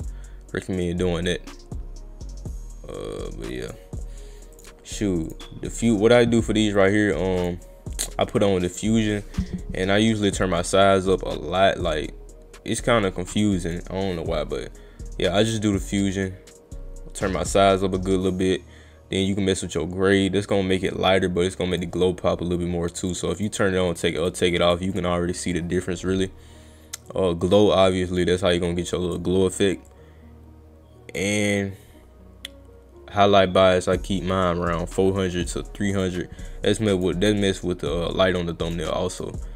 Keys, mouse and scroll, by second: 0.0-2.7 drag, 2.8 click, 4.6 click, 5.3 click, 7.4 click, 8.0 click, 10.1 click, 12.2-13.8 drag, 15.4-17.0 drag, 20.9 click, 23.0 click, 23.4 click, 23.9 click, 24.2 click, 24.7 click, 24.9 click, 27.1-29.2 drag, 29.9-31.2 drag, 33.7-36.0 drag, 37.0 click, 37.2 click, 38.7 click, 39.2 click.